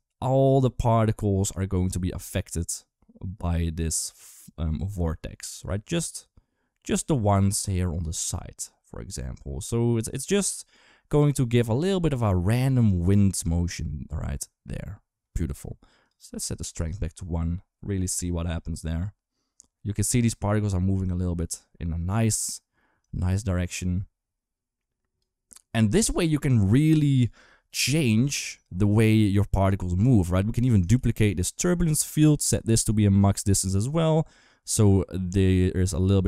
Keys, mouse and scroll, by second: 7.8 g, 15.9 click, 22.8 click, 29.0 click, 30.8 shift+d, 33.0 click, 33.5 click.